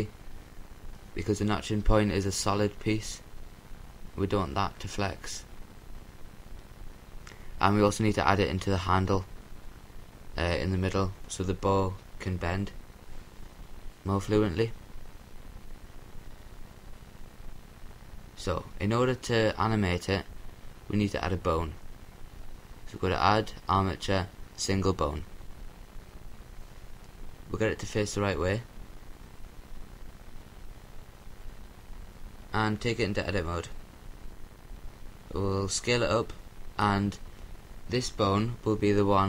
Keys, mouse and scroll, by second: 0.2-2.0 drag, 3.8 a, 3.8 l, 5.0 l, 6.6 l, 8.2-12.2 drag, 11.6 Tab, 12.9-15.6 middle drag, 20.6-22.4 drag, 25.3 r, 28.0-29.6 drag, 28.7-29.6 scroll up 1, 29.6 Tab, 29.6-30.9 scroll up 1, 30.9 scroll up 1, 31.0 middle click, 31.0-32.4 right drag, 32.4 s, 33.3-36.3 drag, 36.3 s, 37.1-39.2 drag.